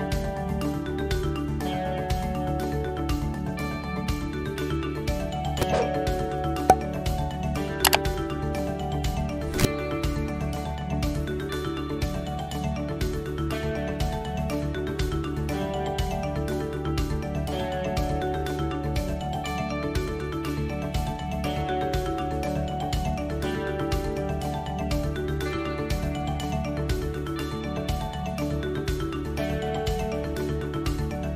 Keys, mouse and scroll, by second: 2.7 click, 3.2 middle click, 4.7 e, 8.4 middle click, 9.0 middle click, 10.0 click, 10.6 middle click, 11.0 middle click, 11.9 e, 13.7 click, 14.0 middle click, 14.6 click, 15.0 middle click, 15.8 middle click, 16.6 e, 17.8 middle click, 18.9 click, 19.3 middle click, 20.3 e, 25.9 Tab, 26.2 click, 28.4 h, 28.9 middle click.